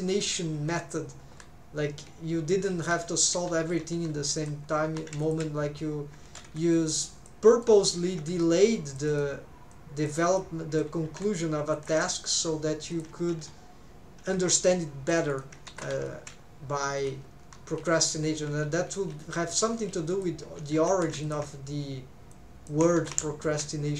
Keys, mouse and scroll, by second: 14.4 Escape, 15.7-17.1 middle drag.